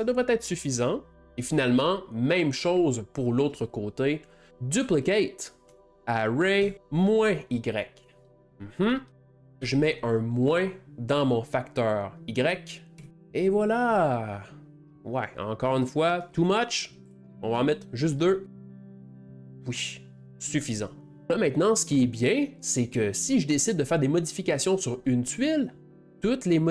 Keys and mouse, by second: 1.2-8.4 drag, 8.4 BackSpace, 9.2-12.0 drag, 14.0-17.1 ctrl+middle drag, 17.1-20.3 drag, 18.0 middle click, 21.3-25.9 shift+middle drag, 25.9 g.